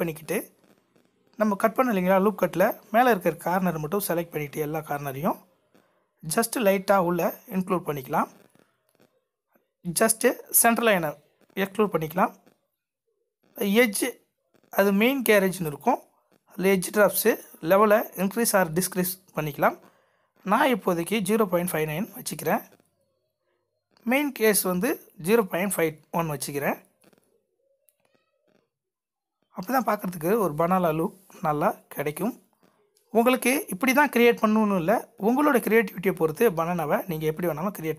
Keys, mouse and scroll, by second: 4.7 middle click, 5.5 g.